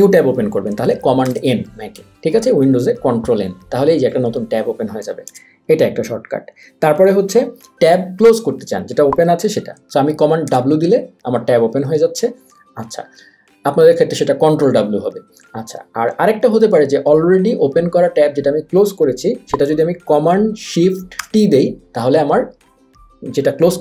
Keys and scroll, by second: 1.3 super+n, 5.3 super+w, 10.5 super+w, 21.2 shift+super+t.